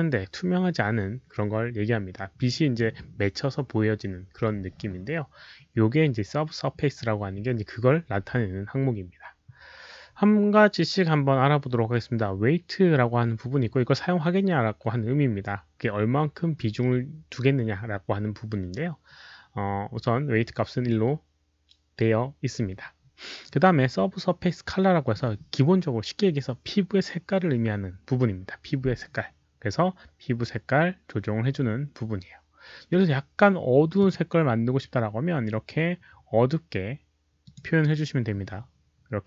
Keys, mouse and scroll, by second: 33.9 click, 37.4 click.